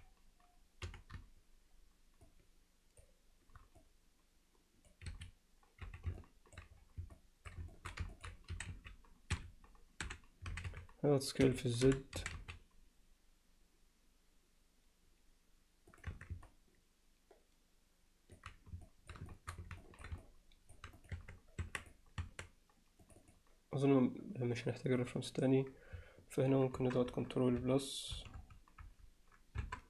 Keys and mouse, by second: 0.9 c, 5.8 z, 6.2 alt+middle click, 7.2 alt+middle click, 7.7 alt+shift+middle click, 8.1 ctrl+alt+middle click, 8.6 s, 10.0 0, 10.6 s, 11.9 o, 12.2 s, 16.1 Tab, 16.5-18.4 alt+middle drag, 18.9 alt+middle click, 19.3 shift+middle drag, 19.8 ctrl+alt+middle drag, 20.2-20.7 alt+middle drag, 21.0 click, 21.1 Tab, 21.6 Tab, 21.8 click, 22.2 Tab, 23.2 click, 25.0 click, 26.8 ctrl+KP_Add, 28.2 ctrl+KP_Subtract.